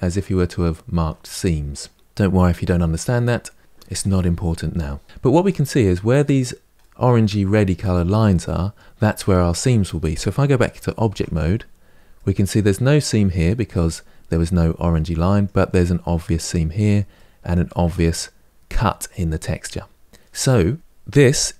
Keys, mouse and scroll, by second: 5.0-5.5 middle drag, 5.5-6.1 scroll up 2, 6.7-8.5 middle drag, 8.5-10.4 scroll down 1, 10.9 Tab, 11.9-15.2 middle drag, 15.2-16.5 scroll up 1, 16.5-16.9 scroll up 1, 16.9-20.0 middle drag, 20.0 scroll down 2.